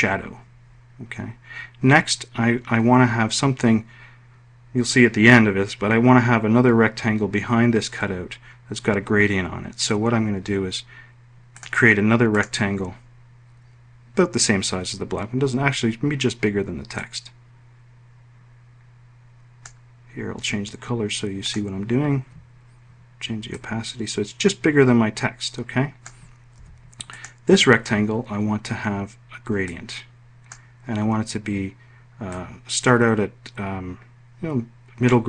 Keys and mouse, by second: 11.2 click, 11.9 click, 16.6-19.4 drag, 21.0 click, 26.1 F1.